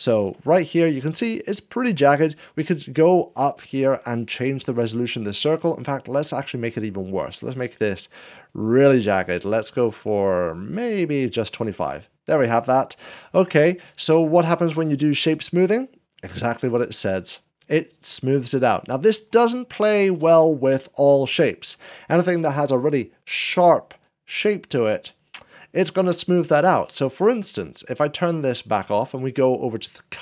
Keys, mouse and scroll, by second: 0.5 scroll up 1, 0.9 shift+middle click, 1.2 scroll up 1, 3.2 scroll up 1, 5.7-7.1 drag, 8.3-11.3 drag, 13.8 scroll down 1, 17.1-18.1 drag, 17.3 scroll up 1, 18.6-20.1 middle drag, 27.5-28.5 drag, 28.7 scroll up 1.